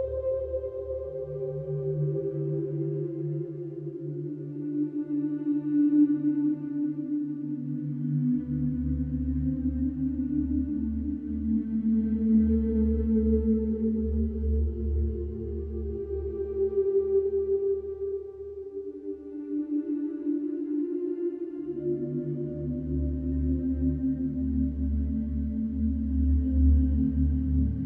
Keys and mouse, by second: 0.4 f, 1.4 click, 2.3-3.7 drag, 6.5 alt+click, 8.4 ctrl+z, 9.1 click, 11.6-12.7 drag, 13.6-15.1 drag, 16.0-17.1 drag, 17.7-18.7 drag, 19.2 click, 20.8 click, 22.4 alt+click, 23.1 ctrl+alt+click, 23.7-27.8 alt+drag.